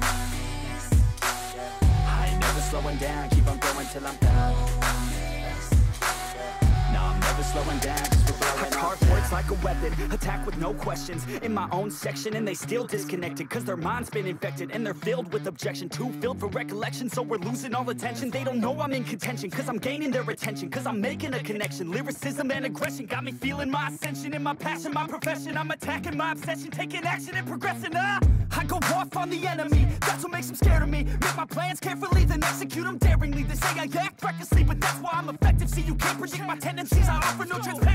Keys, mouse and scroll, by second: 4.7 right click, 8.2 ctrl+d, 8.9 ctrl+d, 19.4 double click.